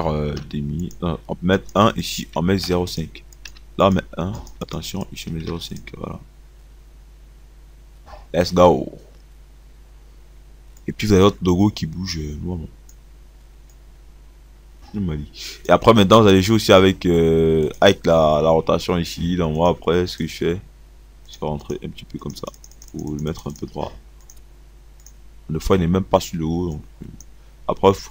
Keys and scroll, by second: 0.3-3.4 typing, 4.5 1, 5.4 ..